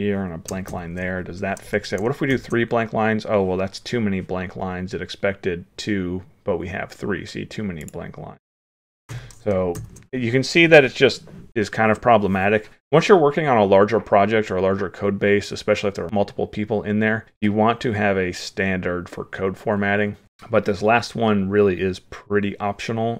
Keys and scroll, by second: 2.3 ctrl+s, 9.8 ctrl+s.